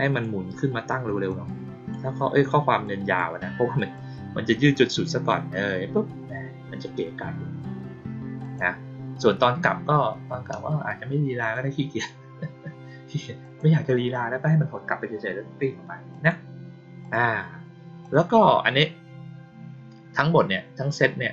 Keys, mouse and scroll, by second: 1.2 click, 2.8 click, 3.7 click, 8.3 click, 11.3 click, 13.3 click, 16.0 click, 16.9 click, 17.9 click.